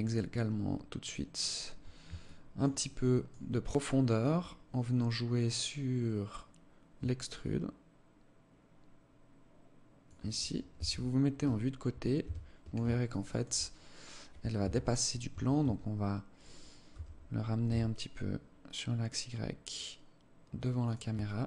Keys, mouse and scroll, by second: 1.8 alt+shift+click, 2.4 alt+click, 3.2 alt+click, 7.0 shift+click, 10.3 KP_3, 11.1-11.5 scroll down 3, 11.8 KP_3, 12.5 alt+shift+scroll down 1, 12.6 alt+shift+click, 13.3-13.6 scroll up 5, 14.2 KP_3, 14.9 Tab, 15.2 Tab, 16.5 g, 20.8 alt+click.